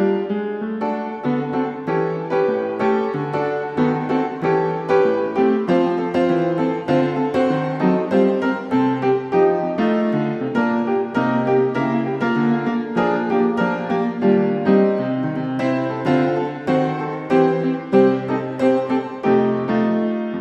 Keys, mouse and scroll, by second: 1.2 click, 2.6 Escape, 5.1 click, 6.6 click, 8.0 click, 9.2 click, 9.8 Escape, 10.4 scroll, 11.7 click, 12.6 click, 14.5 click, 18.6 click, 19.4 click, 20.2 click.